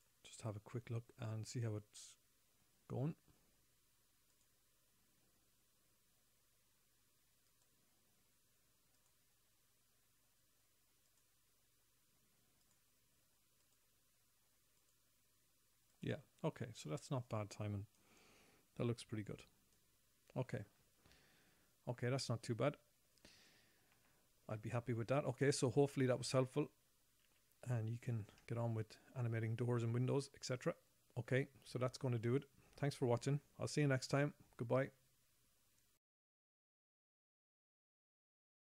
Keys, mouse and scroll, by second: 4.7 click, 7.9 click, 9.3 click, 11.5 click, 13.0 click, 14.0 click, 15.2 click, 16.4 click, 17.8 right click, 19.7 right click, 27.7 z, 28.6 z.